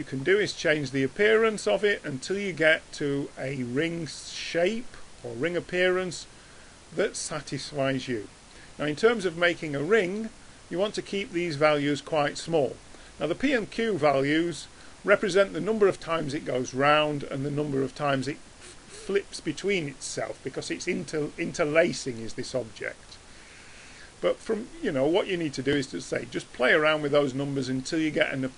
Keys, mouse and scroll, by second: 1.5-5.3 drag, 5.3-6.9 middle drag, 9.1 middle click, 13.9-19.8 middle drag, 21.9-24.9 drag, 26.4 drag.